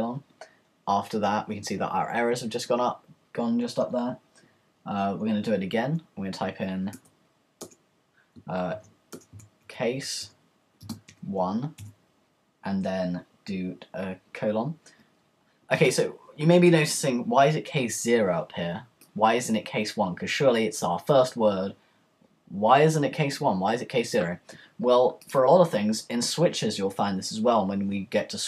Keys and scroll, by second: 6.9 Return, 8.7-11.8 typing.